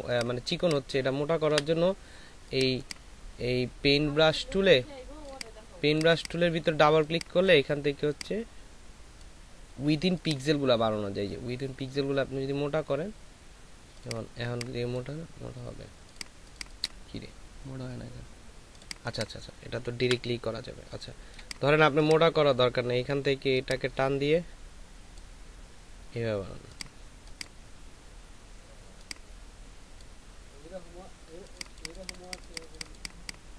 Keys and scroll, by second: 1.5 Delete, 20.0 Delete.